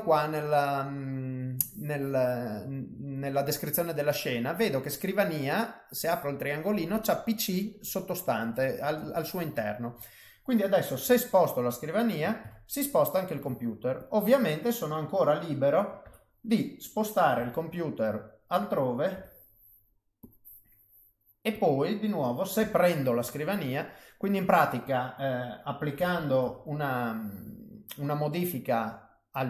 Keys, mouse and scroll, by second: 3.1 click, 4.5 click, 5.9 click, 8.3 click, 9.6 middle click, 11.0 g, 12.6 ctrl+middle click, 13.9 click, 14.4 middle click, 16.0 KP_7, 17.3 g, 19.1 r, 20.5 middle click, 21.5 click, 22.6 g, 23.8 middle click, 25.9 r.